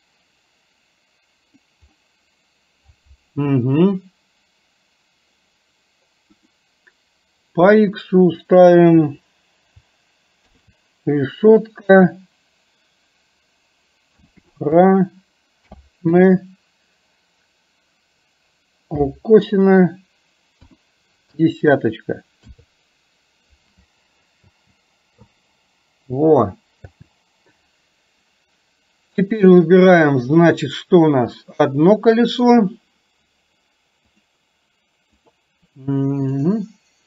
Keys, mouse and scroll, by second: 0.0-1.6 drag, 6.6-22.6 drag, 24.5 space, 27.5 space, 29.4 click, 30.5-32.5 middle drag, 35.3 click, 36.5 click.